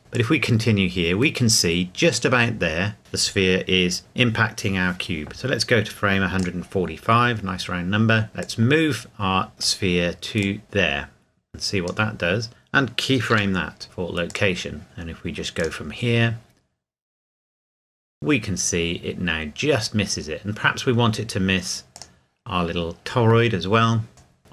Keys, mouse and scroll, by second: 0.1 click, 0.9-3.0 drag, 6.4 click, 8.4 click, 14.3 click, 21.9 click, 24.1 click.